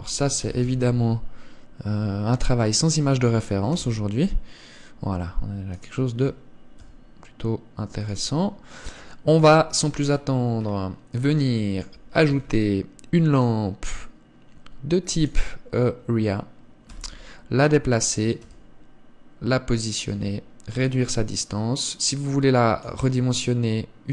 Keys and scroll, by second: 4.1 KP_0, 9.8 KP_3, 12.6 shift+a.